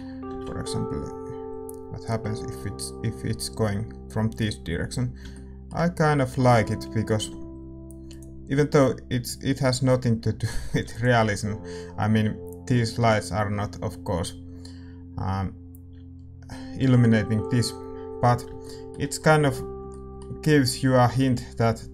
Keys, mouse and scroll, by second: 7.2 g, 18.6-21.9 middle drag.